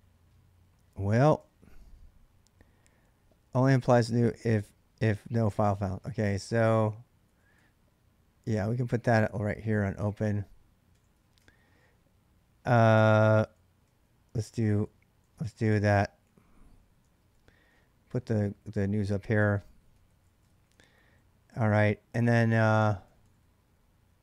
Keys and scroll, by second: 0.0-2.4 typing, 7.1-11.3 typing, 10.9 Return, 11.2 ctrl+[, 12.6-24.2 typing.